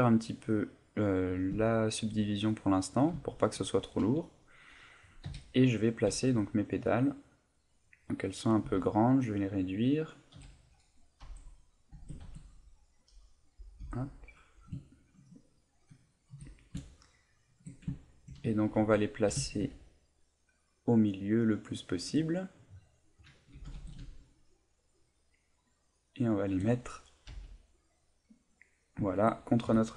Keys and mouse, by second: 0.8 click, 1.6 shift+middle click, 2.3 middle click, 3.2 shift+middle click, 3.7 middle click, 5.2 KP_1, 6.1 g, 8.1 click, 8.7 s, 9.7 click, 10.4 KP_7, 11.2 z, 11.9 g, 13.7 click, 13.8 z, 14.0 middle click, 14.9 ctrl+middle click, 15.4 middle click, 16.3 KP_1, 17.0 shift+middle click, 17.4 shift+middle click, 17.9 ctrl+middle click, 18.5 shift+middle click, 19.3 g, 22.1 shift+click, 22.3 middle click, 23.6 g, 26.4 shift+click, 27.3 a, 27.8 middle click, 29.7 KP_1.